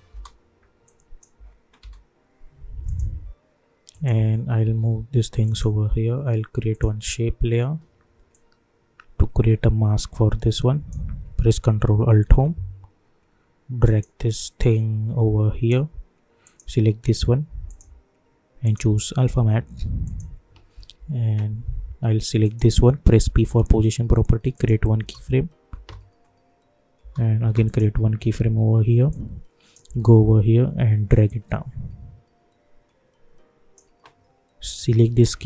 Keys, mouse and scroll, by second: 0.8 click, 1.3 space, 2.8 click, 4.6 [, 5.4-12.2 drag, 12.2 ctrl+alt+Home, 13.8-16.4 drag, 22.4 click, 23.2 p, 24.5 click, 24.9 space, 27.6 click, 29.8 j, 31.2-35.4 drag.